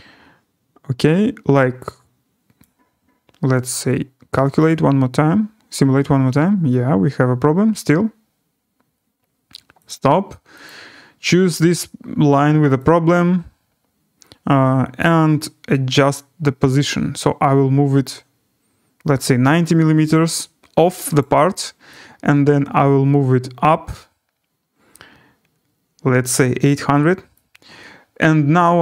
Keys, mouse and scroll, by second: 2.6 click, 3.7 click, 4.6 click, 9.8 click, 10.6 click, 12.7 click, 21.1 click, 27.3 click.